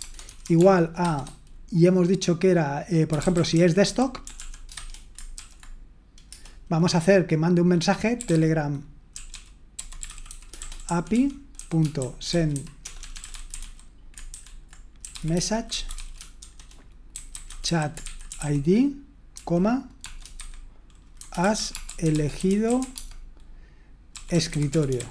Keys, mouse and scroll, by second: 0.0-1.4 typing, 3.5-6.3 typing, 9.3-25.1 typing.